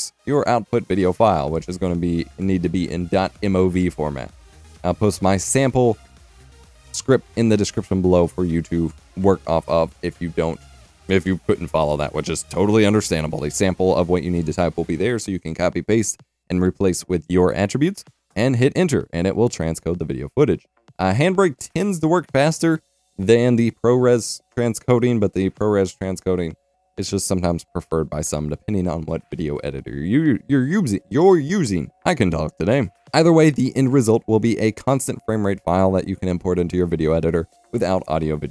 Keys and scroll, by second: 0.0-0.1 typing, 0.8 Return.